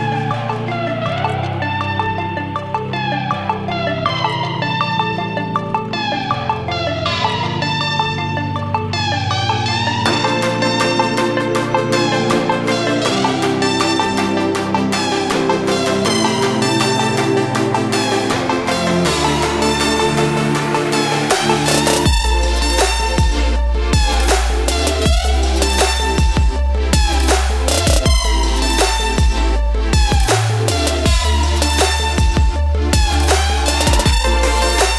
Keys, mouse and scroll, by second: 3.9 ctrl+space, 4.1 ctrl+click, 4.3 ctrl+space, 4.9 ctrl+0, 5.2 typing, 6.2 click, 6.6 space, 6.8 click, 7.1 space, 7.2 ctrl+click, 12.4-13.8 alt+drag, 13.8 ctrl+z, 14.1 ctrl+space, 14.2 ctrl+click, 17.7 shift+space, 17.8 shift+click, 18.1 shift+space, 18.3 shift+click, 20.6 space, 21.1 click, 23.2 space, 23.6-25.6 ctrl+drag, 25.6-27.6 shift+drag, 27.6 space, 27.8 click, 28.0 space, 28.5 click, 29.7 space, 30.1-32.1 ctrl+drag, 32.1 right click, 32.7 click.